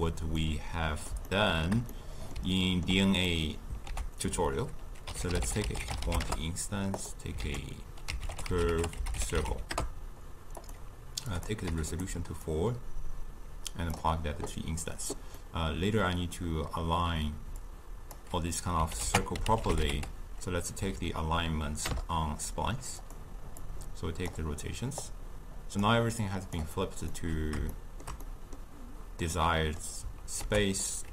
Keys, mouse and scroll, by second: 0.5-7.0 middle drag, 14.0-27.2 drag, 27.2-31.1 middle drag.